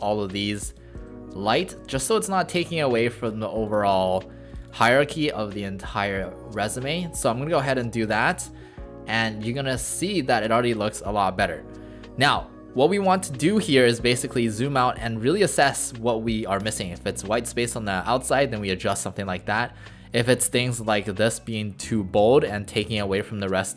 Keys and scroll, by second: 5.0 ctrl+a, 8.4 ctrl+a.